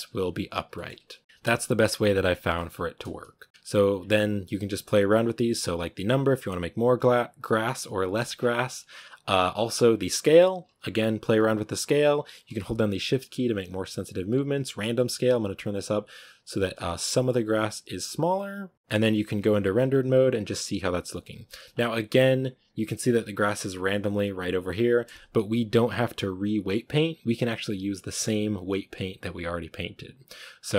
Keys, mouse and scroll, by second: 0.3 right click, 0.6-1.2 shift+middle drag, 1.2-1.9 scroll up 1, 1.9-2.4 scroll up 1, 2.4-6.0 shift+middle drag, 6.0-13.7 drag, 14.6-19.2 shift+drag, 19.2 z, 19.7 a, 22.2 z, 22.3-22.7 scroll down 4, 24.1-24.8 right drag.